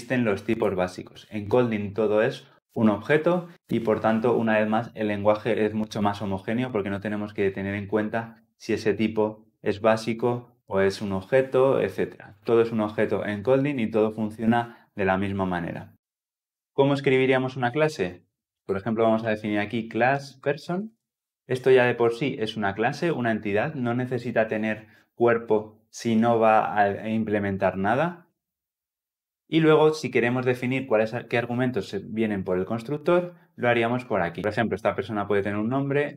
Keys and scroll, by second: 19.9 Return.